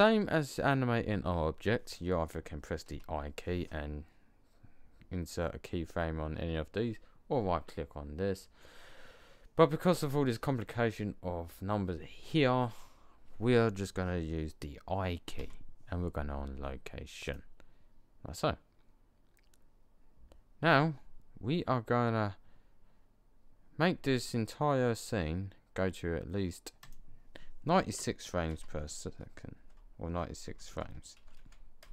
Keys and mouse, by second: 2.8 i, 15.3 i, 26.7-29.0 drag, 30.6 BackSpace.